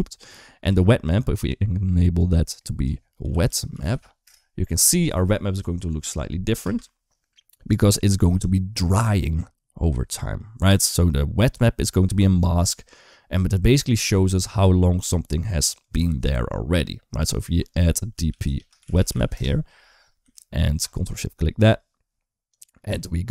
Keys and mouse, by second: 0.3 shift+middle click, 0.9-4.1 drag, 6.5 space, 11.7 space, 15.2 middle click, 15.7-19.1 drag, 20.6 ctrl+shift+click, 22.3 click.